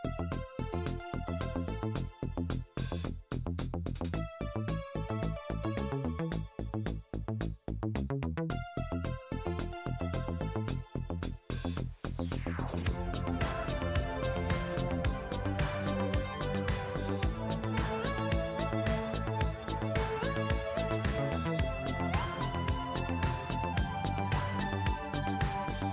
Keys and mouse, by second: 0.3 click, 0.4-1.5 middle drag, 0.5 g, 1.7 shift+middle click, 2.4 shift+middle click, 3.5 g, 5.6 g, 7.0 shift+middle click, 7.5 click, 7.9-10.0 shift+middle drag, 10.0 click, 10.1-12.8 middle drag, 10.7 g, 12.8 click, 12.9 shift+middle click, 13.5-14.5 drag, 14.9 click, 16.3 middle click, 18.6 click, 19.8 g, 20.8 g, 22.1-22.4 shift+middle drag, 23.0 Tab, 23.0-25.9 middle drag, 24.1 Tab.